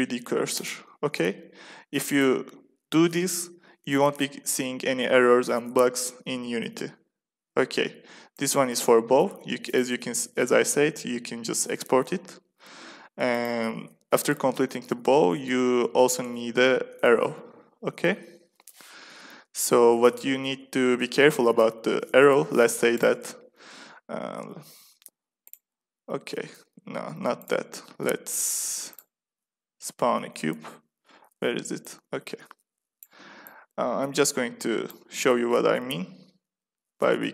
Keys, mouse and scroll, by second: 8.2-11.6 drag, 13.2-15.5 drag, 15.5 a, 15.9 a, 22.5 x, 23.7 middle click, 24.2 shift+a, 27.0 x, 27.8 shift+a, 30.4 shift+c, 31.7-33.9 drag, 35.1-37.2 drag, 35.1 s.